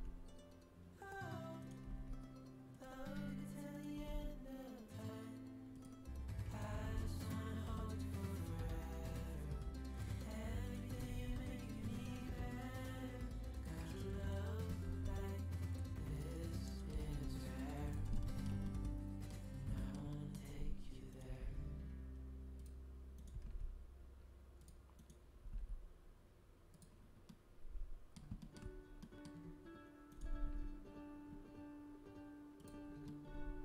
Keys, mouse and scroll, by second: 1.8 g, 3.7 middle click, 3.9 g, 4.4-5.5 drag, 6.5-8.4 drag, 6.7 g, 10.6-13.5 drag, 10.9 g, 14.2 click, 14.6 g, 16.9 g, 20.4 g, 21.2 g, 23.3 g, 25.4 g, 30.3 g.